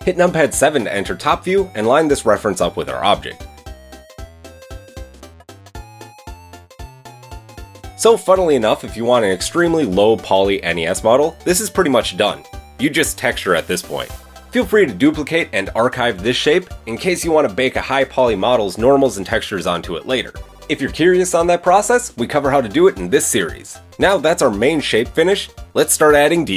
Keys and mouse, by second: 0.0 KP_7, 1.9 click, 2.3-7.2 middle drag, 3.3 g, 6.4 g, 7.2-9.2 drag, 9.3 click, 9.8-11.2 middle drag, 11.4-25.5 middle drag, 24.0 KP_1, 26.3 Tab.